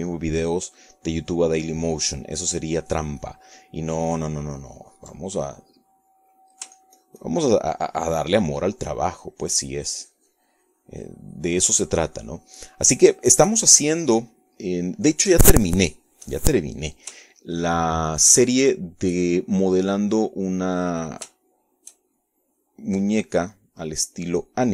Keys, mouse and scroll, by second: 7.2 ctrl+click, 8.0-18.3 drag, 18.4 shift+click, 19.2-20.4 shift+middle drag, 20.5 shift+middle click, 21.7-22.7 middle drag, 22.9 middle click.